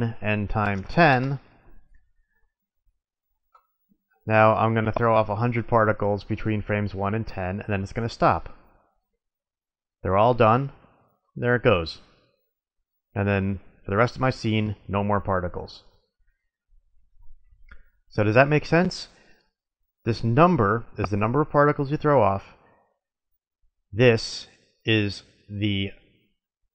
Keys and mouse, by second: 4.2-6.1 drag, 8.8 click, 10.8-12.1 middle drag, 13.8-14.4 middle drag, 15.6-17.3 drag, 17.3-19.1 middle drag.